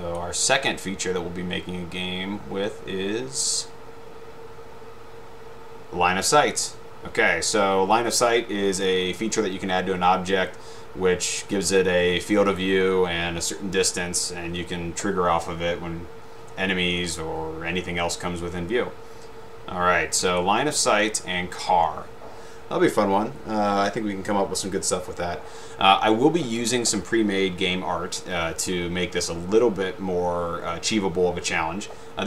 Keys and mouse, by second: 20.3 click, 26.8 click.